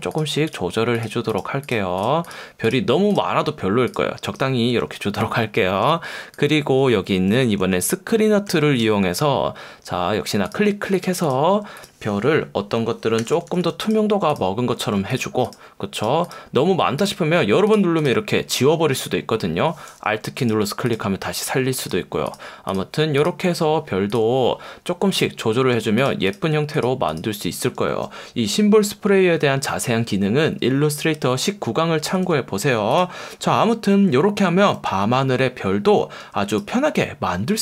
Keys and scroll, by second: 7.6 F1, 8.4 F1, 13.2 [, 14.7 [, 32.1 v, 34.9 F1, 36.2 F1.